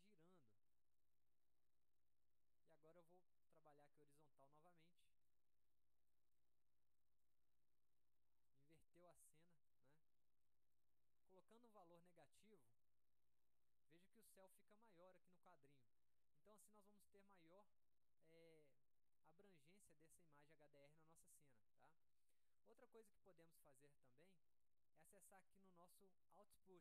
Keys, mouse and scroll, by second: 0.9 click, 3.6 click, 5.2 click, 6.3 click, 7.2 click, 8.7 click, 9.9 click, 10.6 click, 12.7 click, 16.1-17.2 drag, 18.6 click, 20.7 click, 22.8-23.4 drag, 24.4 click, 25.8 click.